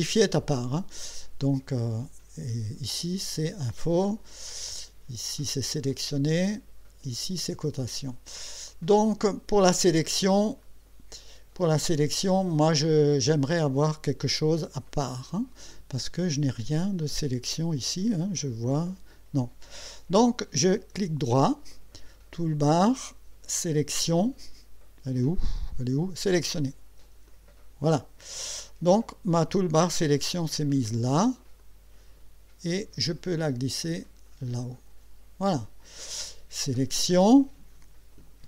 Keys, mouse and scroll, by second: 1.9 click, 4.3 click, 6.5 click, 10.6 click, 20.9 right click, 27.3 click, 31.6-34.8 drag.